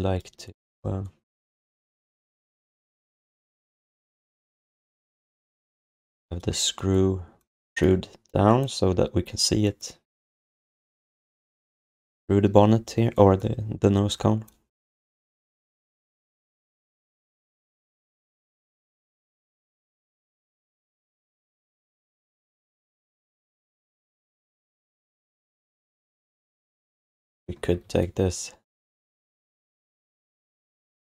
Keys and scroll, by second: 4.1 alt+q, 5.8 f, 14.8 q, 15.5 alt+q, 21.2 q, 23.9 alt+q, 24.6 alt+q.